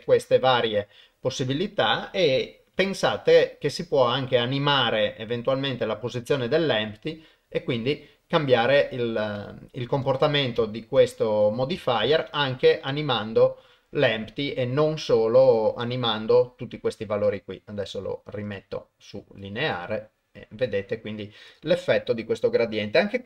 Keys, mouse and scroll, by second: 0.0 ctrl+Tab, 1.4 click, 2.7 g, 11.3 click, 12.0 ctrl+Tab, 17.4-18.5 drag, 19.4-19.7 drag, 20.7-21.5 drag.